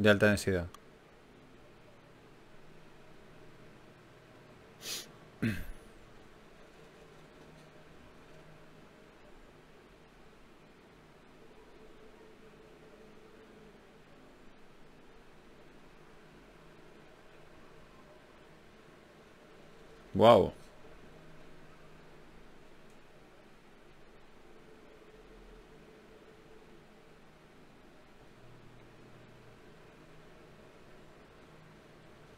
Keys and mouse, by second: 0.3 r, 1.1 g, 2.4 s, 3.5 g, 6.7 g, 9.7-11.3 drag, 11.3-14.1 middle drag, 15.5 ctrl+r, 19.1 click, 24.0 ctrl+r, 29.0 Tab, 31.4 click, 32.2 Tab.